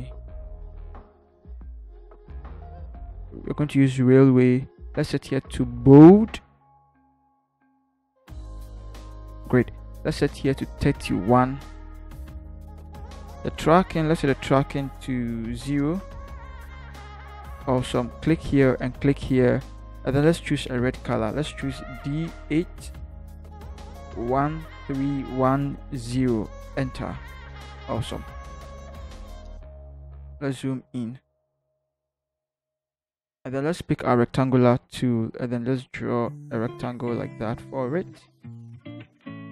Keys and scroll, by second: 0.8-1.8 typing, 11.6-12.4 typing, 23.1 8, 24.3 1, 24.9 3, 25.2 1, 25.8 0, 26.6 Return, 30.5 ctrl+=.